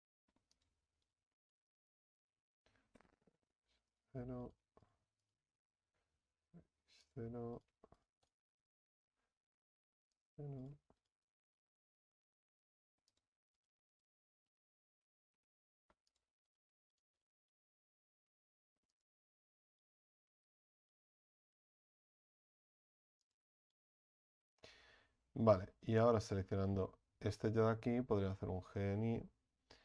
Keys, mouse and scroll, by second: 1.0 right click, 2.8 s, 4.4 right click, 6.0 s, 7.5 right click, 9.3 s, 10.6 right click, 12.1 s, 13.6 right click, 15.0 s, 16.5 right click, 18.1 s, 19.8 right click, 22.1 s, 23.6-28.2 right drag, 28.2 g.